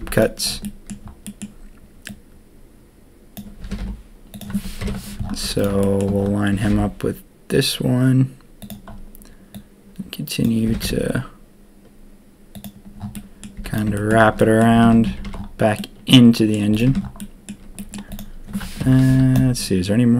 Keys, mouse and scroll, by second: 0.0 z, 0.6 click, 1.2 click, 2.0-3.6 drag, 3.6 g, 4.8 ctrl+KP_3, 5.4 z, 6.5 g, 9.5 click, 10.6 g, 13.1 click, 13.5 z, 13.9 shift+click, 14.3 click, 14.6 a, 14.8 a, 14.9 Tab, 15.0 a, 15.2 a, 15.8-16.5 drag, 16.8 Tab, 17.1 click, 17.7 click, 18.8 ctrl+KP_3, 19.0 z.